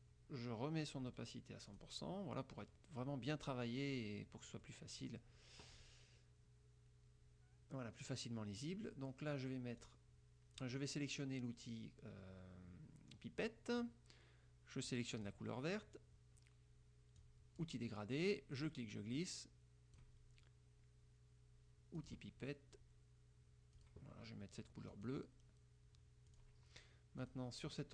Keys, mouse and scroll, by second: 1.2 right click, 1.8 click, 4.7 click, 9.9 click, 15.0 click, 17.3 click, 18.7-20.3 drag, 22.1 click, 23.9 click, 25.1 click, 26.4 click, 27.3 click.